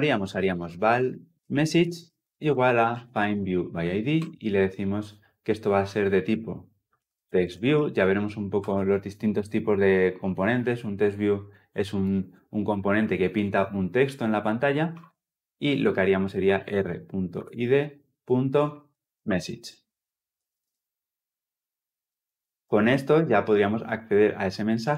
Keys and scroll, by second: 4.1 Return, 5.1 Return, 8.5 Return, 10.5 Return.